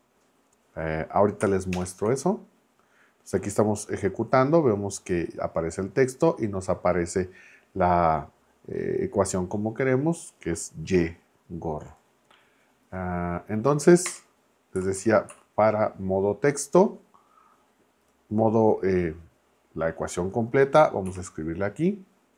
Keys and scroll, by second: 1.7 ctrl+Return, 14.1 Return, 14.8 Left, 15.0 Up, 21.1 Right.